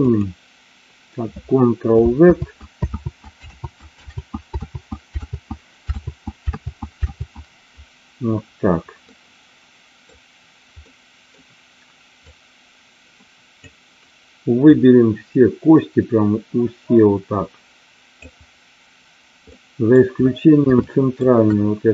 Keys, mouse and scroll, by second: 0.0-2.9 drag, 3.1 ctrl+z, 3.4 ctrl+z, 4.0 ctrl+z, 4.5 ctrl+z, 5.3 ctrl+z, 5.9 ctrl+z, 6.5 ctrl+z, 7.0 ctrl+z, 9.1-10.0 middle drag, 10.9 middle click, 12.1-13.5 drag, 14.7-18.3 drag, 19.5 middle click, 20.8 shift+middle click.